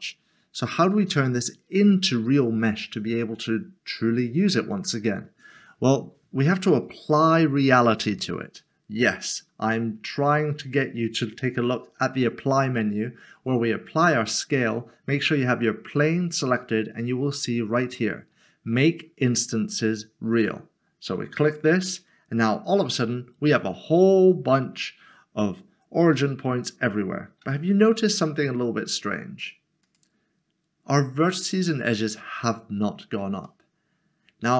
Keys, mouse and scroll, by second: 4.5 scroll down 1, 12.0 ctrl+a, 21.5 click, 27.4 g, 28.0 z, 30.1 click, 33.4 click, 33.6 middle click.